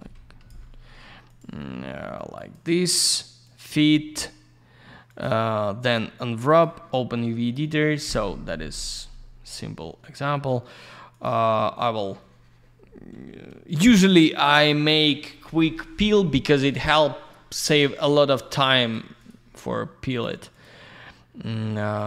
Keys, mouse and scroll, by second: 0.1 Escape, 1.2 click, 1.4 click, 2.3 click, 2.5 click, 3.4 click, 3.5 click, 5.0 click, 5.2 click, 6.4 click, 6.6 click, 11.1 click, 11.2 click, 16.8-17.3 scroll up 1, 17.3 scroll down 1, 17.9 click, 18.0 click, 18.8 click, 18.9 click, 19.1 click, 19.2 click, 20.1 click, 20.2 click, 20.5 click, 20.6 click, 21.9 click.